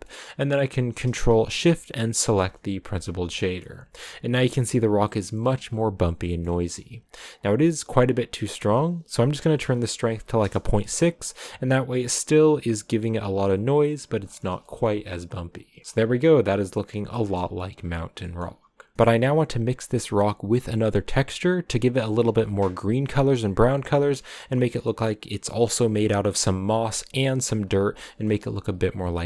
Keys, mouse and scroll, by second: 2.0 ctrl+shift+click, 3.4 shift+middle click, 3.5-3.9 scroll up 5, 5.1 middle click, 6.2 middle click, 6.8-7.3 scroll up 2, 8.4-12.1 drag, 13.7-14.5 scroll down 7, 14.5-15.9 shift+middle drag, 15.9-16.9 shift+scroll up 3, 17.0 shift+middle click, 17.9-18.5 scroll down 6, 18.5 middle click, 19.2-21.4 scroll down 1, 22.0 shift+middle click, 22.3 scroll up 2, 27.5 scroll down 3, 27.9-29.2 shift+middle drag.